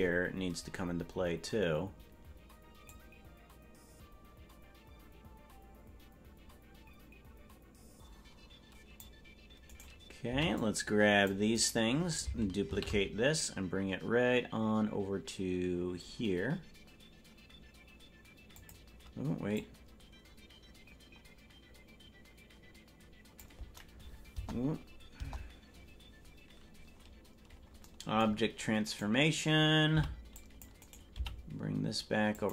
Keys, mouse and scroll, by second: 1.1 scroll down 1, 3.0-9.1 drag, 9.7 right click, 10.3 c, 12.7 shift+d, 19.6-23.5 drag, 24.3 KP_0, 25.1 KP_0, 26.9-27.5 scroll up 2, 27.5-27.8 scroll up 7, 28.9 right click, 29.9 c, 31.1 g.